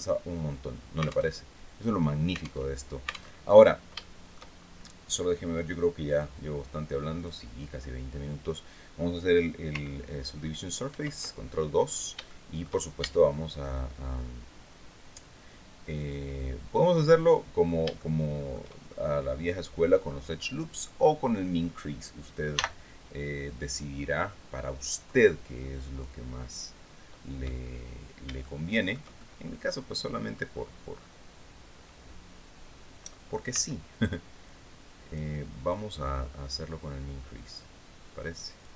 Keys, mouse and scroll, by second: 0.8 alt+Tab, 2.1 alt+Tab, 2.8 alt+Tab, 3.5 shift+middle click, 4.0 shift+scroll up 2, 5.6 click, 6.6 click, 10.3 ctrl+2, 11.3-11.6 scroll up 2, 11.7 shift+middle click, 12.4 shift+Tab, 17.1 scroll down 2, 17.4 shift+middle click, 18.3-18.6 shift+scroll up 3, 22.0 n, 24.1-25.7 drag, 27.9 shift+middle click, 28.6-30.0 shift+middle drag, 33.0 c, 33.9 click, 35.2-38.3 drag, 38.6 click.